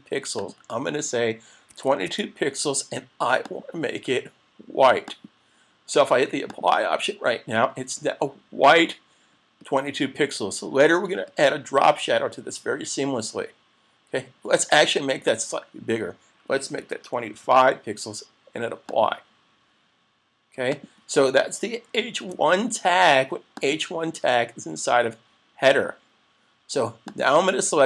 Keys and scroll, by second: 22.2 super+s.